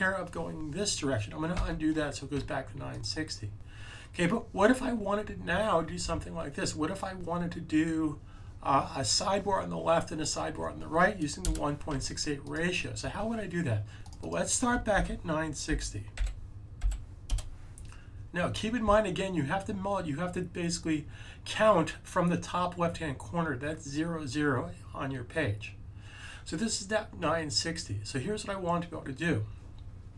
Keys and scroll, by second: 1.5 super+z, 14.8 super+a, 15.6-16.8 typing.